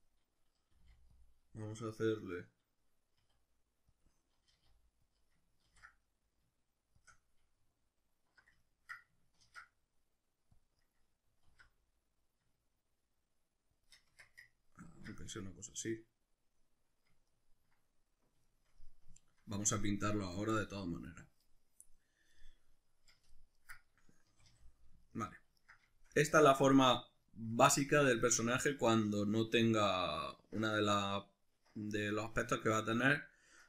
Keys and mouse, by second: 0.0-1.3 middle drag, 0.7 g, 1.3 click, 1.9-4.0 middle drag, 3.2 s, 4.0 click, 4.5 g, 5.2 click, 5.7 ctrl+b, 7.1 click, 8.7 ctrl+middle click, 9.5 ctrl+r, 10.9 right click, 11.5 alt+s, 13.9 shift+click, 14.1 Tab, 14.5-33.6 ctrl+middle drag, 24.2 a.